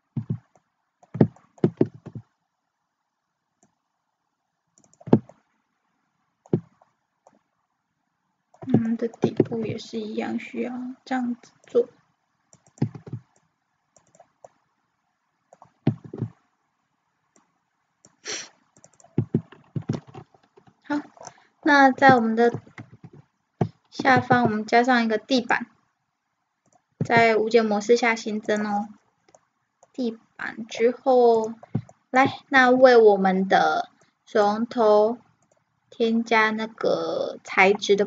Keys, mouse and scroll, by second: 0.6-3.3 middle drag, 1.9 ctrl+r, 5.3 middle click, 7.1 middle click, 7.5-11.7 middle drag, 9.6 ctrl+r, 12.9 ctrl+r, 14.5-16.4 middle drag, 16.1 ctrl+r, 19.0-21.2 drag, 19.8 Tab, 21.2-22.7 middle drag, 22.9 KP_1, 23.3 middle click, 24.0 shift+c, 24.2 shift+a, 27.0 s, 29.4-31.6 middle drag, 31.6-33.9 right drag, 34.0-38.0 drag.